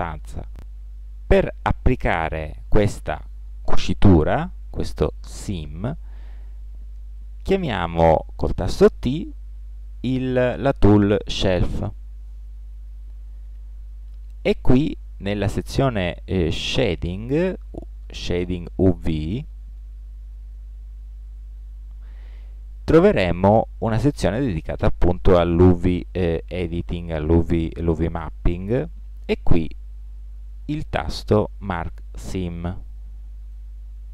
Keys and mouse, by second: 9.2 t.